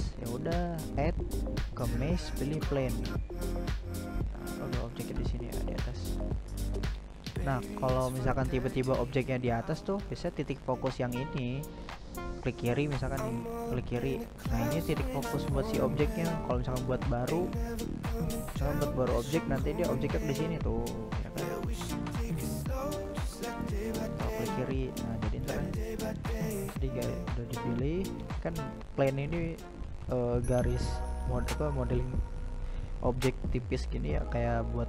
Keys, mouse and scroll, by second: 0.2-1.0 middle drag, 1.0 click, 1.8-4.6 middle drag, 4.6 click, 5.3 click, 5.9 drag, 6.6 drag, 8.7 click, 9.5 drag, 10.1 drag, 10.7 click, 11.4 drag, 11.8 click, 12.3 drag, 12.9 drag, 14.8-18.7 drag, 18.7 x, 20.0-20.9 drag, 21.4 right click, 22.2-25.8 shift+middle drag, 25.8-26.4 scroll down 2, 26.4 middle click, 26.7 g, 28.2-29.7 middle drag, 29.7-30.1 scroll up 1, 30.1-31.0 middle drag, 31.0-31.3 scroll up 1, 31.3 g, 32.8 shift+middle click, 33.3 g.